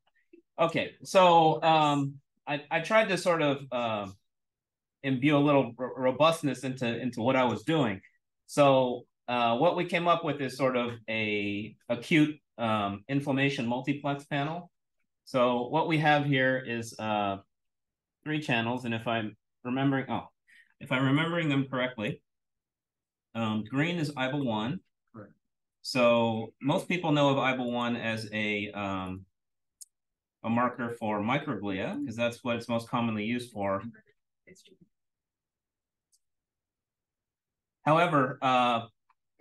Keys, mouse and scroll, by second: 16.5-18.3 scroll up 1, 18.7-19.9 drag, 18.7-19.6 scroll up 1, 19.6-21.1 scroll up 1, 21.1-22.0 drag, 21.1-24.3 scroll up 1, 24.3-25.3 scroll up 1, 25.3-26.0 scroll up 1, 26.0 click, 27.6 click, 29.0 click, 31.9 click, 33.1-33.8 scroll down 1, 34.4 scroll up 1.